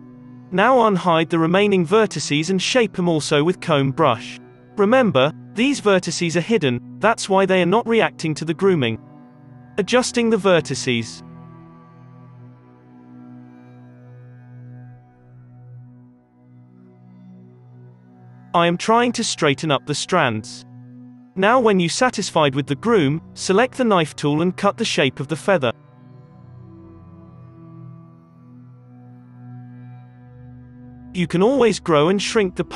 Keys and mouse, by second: 0.9 ctrl+z, 1.4 alt+a, 2.1 alt+h, 2.4 ctrl+i, 2.9 h, 3.5 f, 3.9 f, 9.4-12.2 typing, 11.0 alt+a, 11.0-12.1 middle drag, 13.4 alt+a, 13.8-21.7 typing, 14.1 alt+a, 15.2 alt+a, 15.9 alt+a, 16.4 middle click, 16.7 ctrl+z, 17.6 ctrl+l, 18.4 alt+a, 18.8 ctrl+z, 19.2 middle click, 19.3 ctrl+l, 19.8-20.9 drag, 20.3 alt+a, 20.4 alt+a, 20.9 alt+h, 21.1 alt+a, 21.3-32.7 drag, 26.3 ctrl+z, 28.0 f, 29.1-31.9 f, 31.9 ctrl+z, 32.2 f.